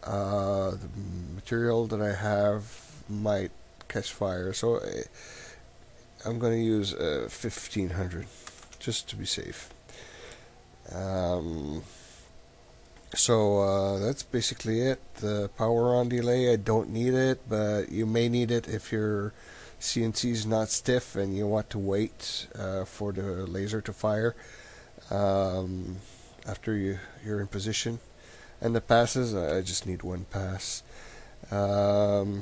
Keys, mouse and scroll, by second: 0.0 click, 10.6 click, 28.5 click, 30.5 click, 32.1 click.